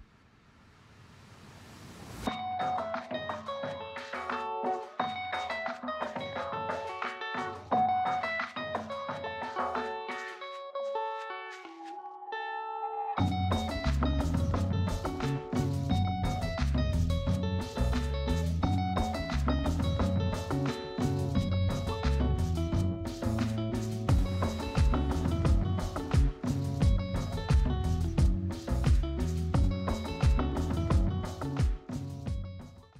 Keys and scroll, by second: 16.0 ctrl+z.